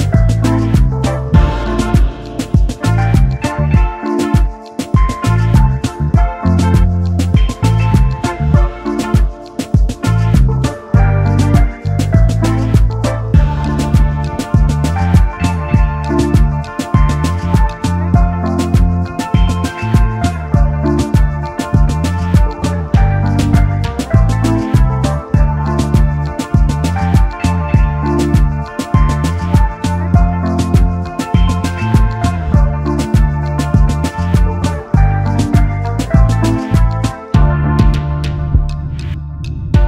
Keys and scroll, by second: 0.5 ctrl+s, 0.5 space, 7.8 space, 9.9 space, 10.3 ctrl+s, 12.3 space, 14.2 space, 15.4 ctrl+s, 17.8 space, 20.2 space, 20.7 ctrl+s, 24.3 ctrl+z, 28.6 space, 31.0 space, 31.3 ctrl+s, 33.5 ctrl+s, 36.2 ctrl+s, 36.3 ctrl+s, 37.7 space.